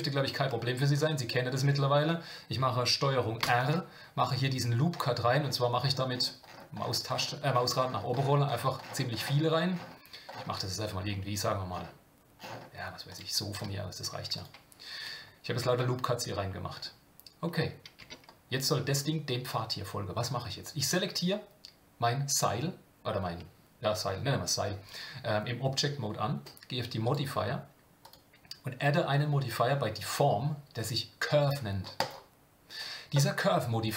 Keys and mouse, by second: 1.3 shift+middle click, 3.4 ctrl+r, 18.0 Tab, 27.1-32.1 drag.